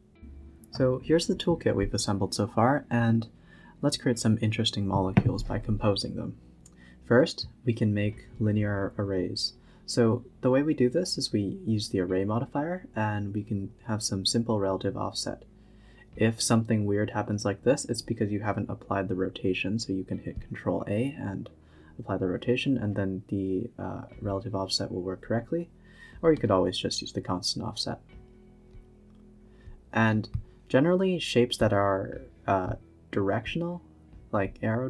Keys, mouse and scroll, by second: 0.0 scroll up 2, 0.5 scroll down 1, 2.5 click, 3.3 shift+d, 4.8 click, 5.1 g, 8.3-11.6 drag, 11.6 scroll down 1, 11.9-13.4 typing, 12.2 click, 13.3 click, 16.1-19.8 drag, 19.8 scroll up 4, 20.0-20.4 scroll down 2, 21.2 ctrl+a, 22.6-24.7 drag, 24.7-25.3 scroll down 2, 25.3-26.2 scroll down 3, 26.2-26.6 drag, 26.6 a, 26.7-27.0 scroll up 2, 27.0-27.4 scroll down 2, 28.0 click, 28.1 shift+d, 30.2-33.2 drag, 33.2-34.4 typing, 33.7 click, 34.5 scroll down 1.